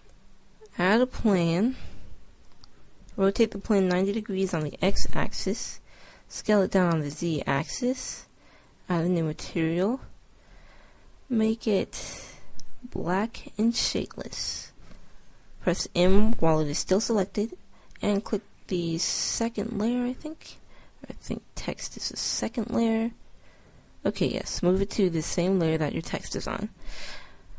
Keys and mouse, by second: 1.9-3.7 drag, 4.2 r, 6.7 s, 16.0 m.